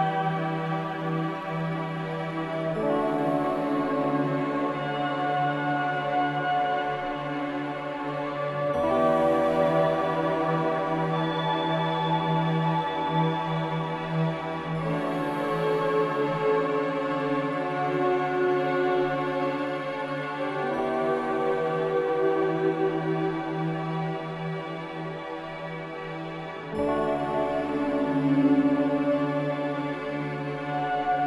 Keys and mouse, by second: 1.2 shift+middle click, 5.8 shift+middle click, 8.1 ctrl+z, 9.0 shift+click, 11.8 click, 14.3 middle click, 14.5 middle click, 15.6-16.0 shift+middle drag, 16.6 shift+middle drag, 17.3 shift+middle click, 18.6 middle click, 20.8-21.5 middle drag, 22.5-23.0 shift+middle drag, 23.5 shift+middle click, 25.0 middle click.